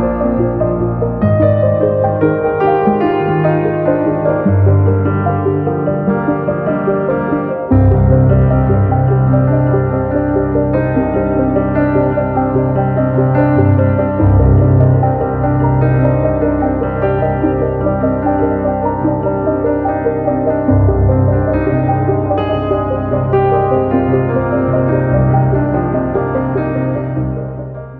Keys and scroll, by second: 6.1 Page_Up, 14.3-15.0 scroll up 1.